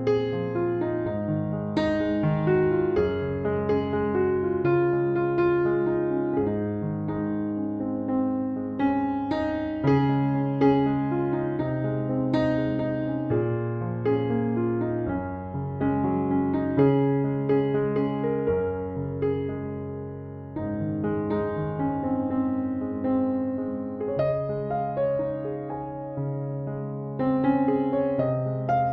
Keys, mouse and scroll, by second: 3.6 ctrl+7, 23.7 5, 24.1 Return.